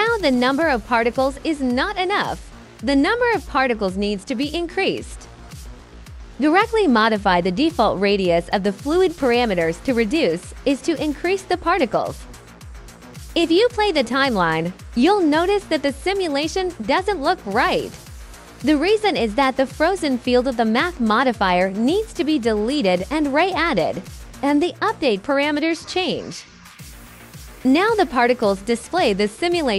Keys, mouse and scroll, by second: 0.1 alt+click, 0.1 alt+right click, 0.3 alt+click, 1.8 ctrl+d, 2.6 click, 3.1 click, 4.8 KP_4, 5.0 click, 5.7 click, 6.6 KP_1, 6.9 KP_5, 7.0 click, 9.3 click, 10.0 click, 13.4 click, 15.2 click, 16.8 click, 18.6 click, 19.3 click, 20.9 Delete, 21.1 click, 22.0 click, 23.4 click, 24.1 click, 28.6 alt+right click.